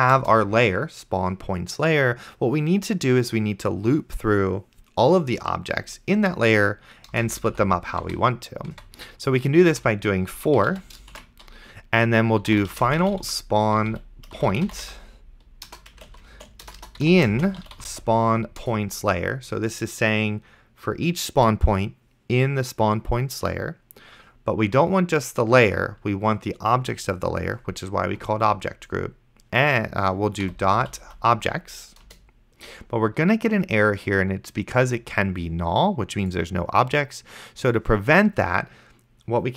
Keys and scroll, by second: 0.2 Return, 7.4 Return, 7.6 Up, 8.1 Tab, 9.7-18.5 typing, 18.6 Return, 30.2-31.6 typing, 32.1 Return.